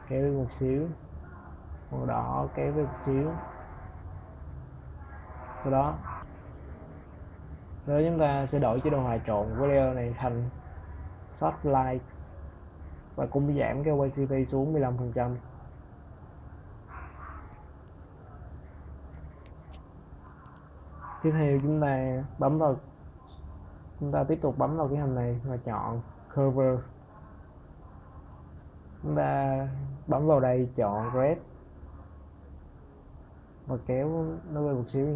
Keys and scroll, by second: 15.1 1, 15.2 5, 15.4 Return.